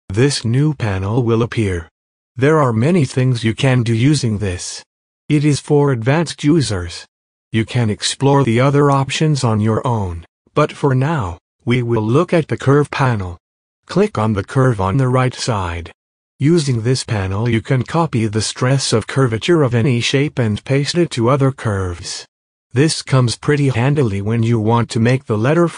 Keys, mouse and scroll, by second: 0.5 click, 9.6 click.